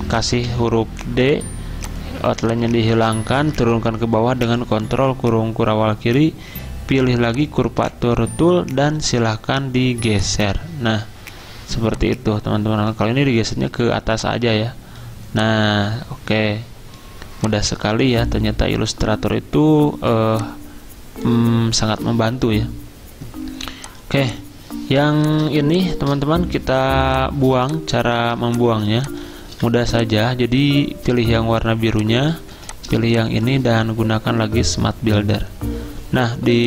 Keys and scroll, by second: 0.2-1.3 typing, 4.5 ctrl+[, 27.6 z, 32.3-33.0 typing.